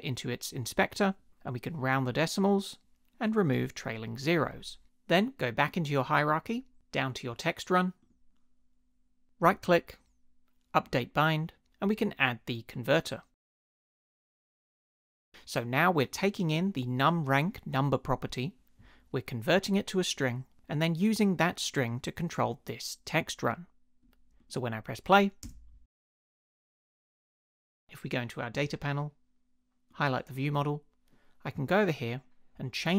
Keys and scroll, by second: 25.4 space.